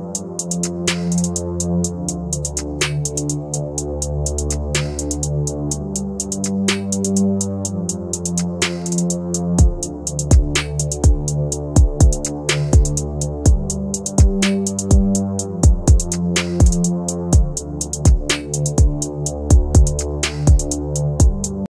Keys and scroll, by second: 17.2 shift+F2, 17.6 F9.